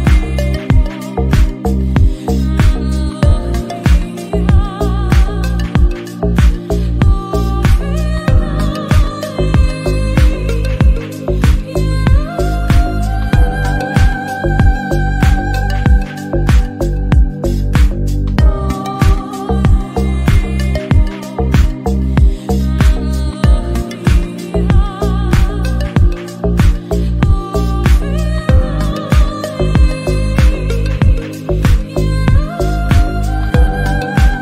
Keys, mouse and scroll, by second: 0.5 scroll down 1, 0.6 Tab, 0.8 click, 0.9-1.2 middle drag, 1.2-1.7 scroll up 3, 1.3 click, 1.7 g, 2.1 scroll down 1, 2.3-2.8 middle drag, 2.8 scroll down 1, 3.0-3.4 middle drag, 3.4 scroll up 2, 3.5 shift+middle click, 3.8 Tab, 4.1 alt+s, 5.0 scroll down 3, 5.0 Tab, 5.1 click, 5.3 middle click, 5.5 click, 5.7 Tab, 6.0 Tab, 6.1 q, 6.6 click, 6.7 scroll down 1, 6.9-7.4 middle drag, 7.4 click, 7.6-8.2 middle drag, 8.5 ctrl+a, 8.8 middle click, 9.6-9.9 drag, 10.0-10.4 middle drag, 10.4 click, 11.0-11.6 middle drag, 11.8 shift+middle click, 12.2 scroll up 3, 12.3 shift+middle click, 12.4 middle click, 12.7 scroll down 2, 12.8 Tab, 13.0 alt+z, 13.3 s, 13.8 alt+z, 13.9 scroll up 2, 14.1 g, 14.6 middle click, 15.0 scroll down 1, 15.2 scroll up 2, 15.5 r, 16.1-16.6 scroll down 3, 16.2 middle click, 16.6 click, 16.8 shift+middle click, 16.9 scroll up 1, 17.3 click, 17.9 click, 18.2 scroll down 1, 18.3 middle click, 18.8 alt+z, 18.9-19.4 middle drag, 19.5 click, 19.7 alt+z, 19.8-20.4 shift+middle drag, 20.4-20.7 scroll down 3, 20.5 shift+middle click, 20.7-21.2 shift+middle drag, 21.2 drag, 21.5 scroll up 2, 21.6-21.9 middle drag, 21.9-22.2 scroll down 1, 22.3-22.9 shift+middle drag, 22.9 scroll up 1, 23.1-23.5 drag, 23.6-24.3 drag, 24.4 shift+d, 24.7 g, 26.0 KP_1, 26.3 g, 28.3-28.6 middle drag, 28.6 click, 28.7 click, 29.2 Tab, 29.2 s, 29.6 y, 29.8 Tab, 29.9 click, 30.0 Tab, 30.1 a, 30.3 s, 31.4 Tab, 31.4 alt+z, 31.5 click, 32.0 Tab, 32.1 a, 32.3 alt+z, 32.4 g, 33.5 scroll up 1, 33.6 middle click, 34.1 scroll down 2, 34.3 middle click.